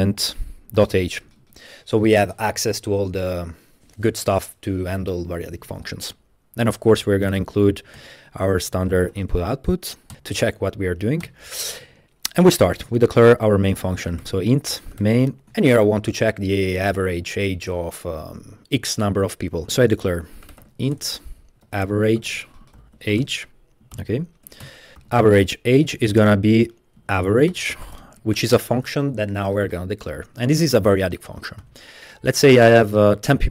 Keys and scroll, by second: 0.0-1.5 typing, 1.6 Return, 6.7-9.8 typing, 8.0 Return, 10.6 Return, 11.2 Return, 12.3 Return, 12.5 Return, 13.2-15.5 typing, 20.3-29.0 typing, 24.5 Return, 24.6 Return, 31.6 Left.